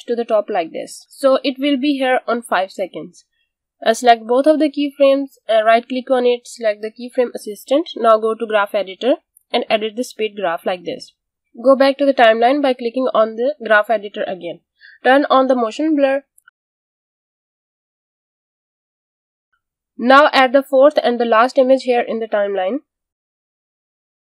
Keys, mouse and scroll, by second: 1.9 space, 4.1 click, 5.3 right click, 7.2 click, 17.1 space, 19.9 space, 20.6 click.